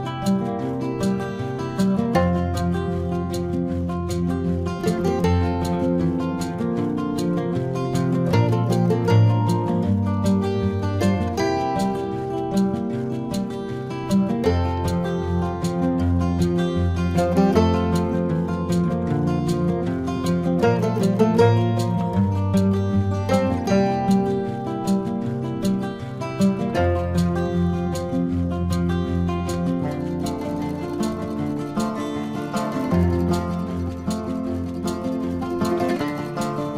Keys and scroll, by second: 3.0 ctrl+alt+z, 4.0 ctrl+alt+z.